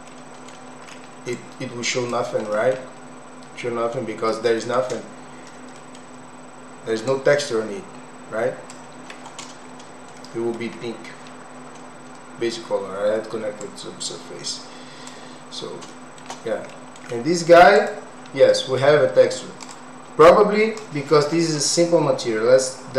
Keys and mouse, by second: 0.1 middle click, 1.5 click, 2.4 middle click, 5.7 middle click, 7.2-8.8 drag, 10.2 middle click, 13.7-15.2 drag, 15.9 shift+middle click, 16.8 middle click, 17.7 click, 18.5 middle click, 19.7 click, 20.3 click.